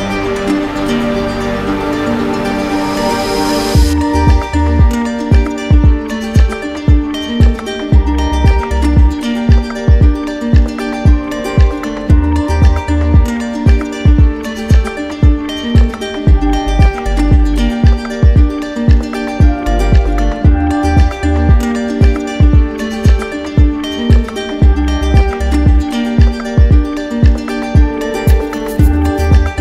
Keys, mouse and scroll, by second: 0.4-1.6 typing, 2.2 Return, 5.7-6.7 drag, 9.9 click, 14.0 click, 15.0 click, 27.7-28.8 drag.